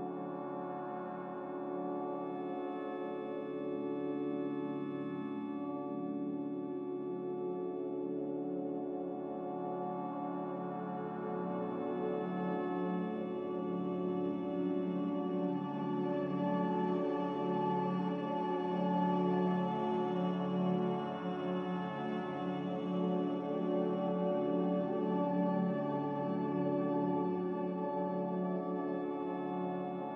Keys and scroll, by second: 0.1 ctrl+g, 12.5 n, 25.4 x, 26.8 typing, 27.3 Return.